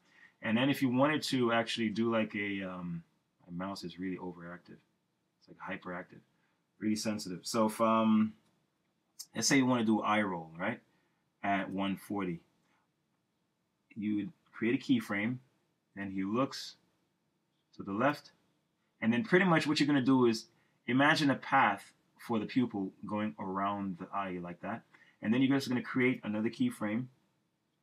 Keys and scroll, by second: 14.6 F6.